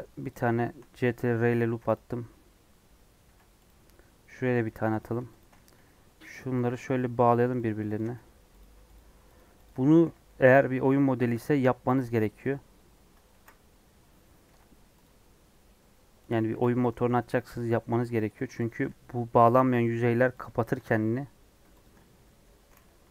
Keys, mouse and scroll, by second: 0.5-1.6 shift+middle drag, 1.6 ctrl+r, 3.2 ctrl+r, 4.9 click, 5.7 j, 6.3 click, 6.8 j, 6.9 middle click, 7.6 click, 8.1 j, 8.5 click, 9.3 shift+click, 9.6 shift+click, 10.0 j, 10.2 middle click, 11.1 ctrl+r, 13.3 ctrl+z, 13.8 scroll down 2, 14.4 ctrl+r, 16.4 ctrl+r, 17.7 scroll up 1, 18.3 Left, 19.1 j, 19.5 middle click, 20.4 click, 22.0 j, 22.5 2.